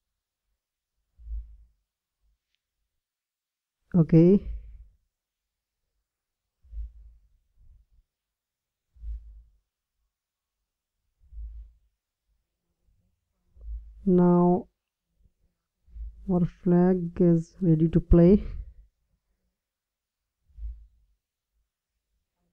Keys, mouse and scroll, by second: 5.0-11.7 drag, 13.6-15.4 drag, 19.6-21.3 drag.